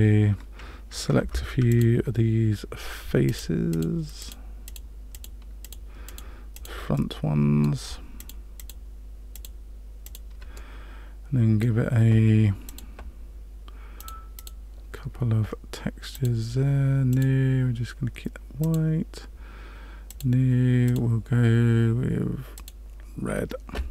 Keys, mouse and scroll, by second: 1.2 3, 1.7 click, 3.2 shift+click, 3.7 shift+click, 4.1 shift+click, 4.6 click, 5.1 shift+click, 5.6 shift+click, 6.0 shift+click, 6.5 shift+click, 6.9 middle click, 8.1 shift+click, 8.5 shift+click, 9.3 shift+click, 10.0 shift+click, 10.5 middle click, 12.6 click, 13.9 click, 14.3 click, 16.1 click, 17.1 click, 18.6 click, 20.0 click, 20.8 click.